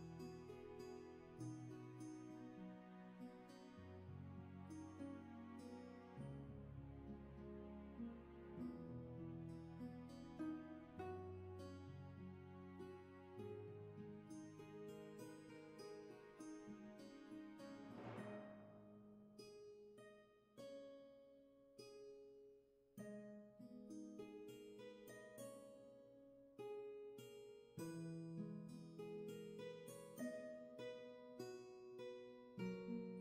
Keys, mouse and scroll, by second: 3.4 ctrl+z, 9.7 ctrl+z, 27.0 ctrl+z, 29.8 ctrl+z.